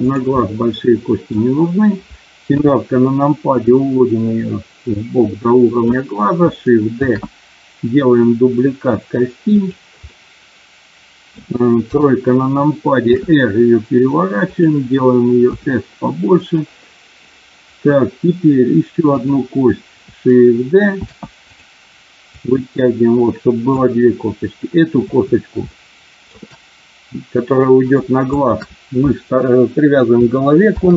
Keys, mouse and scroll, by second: 0.0 click, 0.3-1.3 middle drag, 2.4 KP_7, 3.7-5.7 drag, 6.9 shift+d, 9.5 click, 10.0-11.2 middle drag, 11.9 KP_3, 13.0 r, 14.4 click, 15.5 s, 16.4 click, 19.3 click, 21.0 shift+d, 21.5 click, 22.3-23.8 drag, 25.8 shift+middle click, 28.3 shift+click, 30.6 ctrl+p.